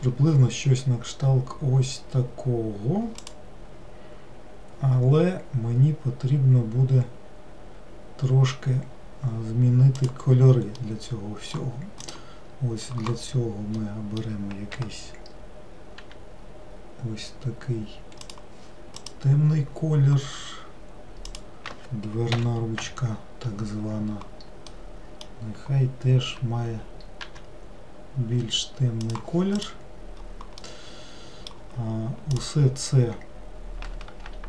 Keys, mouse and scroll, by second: 10.8-12.1 middle drag, 12.1 click, 13.8-16.1 middle drag, 16.1 g, 19.0 click, 21.3 click, 22.4 l, 24.8-27.3 middle drag, 27.3 g, 29.6 click, 30.7-32.4 middle drag, 32.4 click.